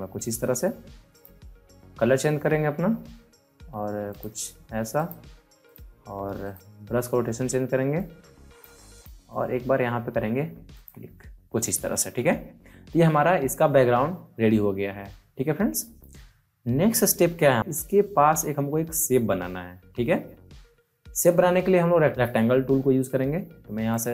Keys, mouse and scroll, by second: 4.0 click, 4.1 click, 6.4 right click, 7.9 click, 7.9 click, 23.8-24.1 drag.